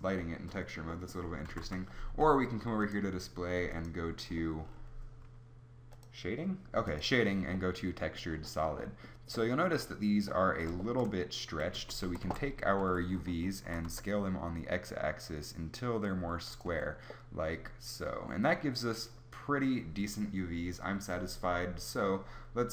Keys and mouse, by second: 1.4 z, 1.6 z, 11.8 Tab, 12.1 a, 12.2 a, 12.8 a, 13.6 s, 16.7 Tab.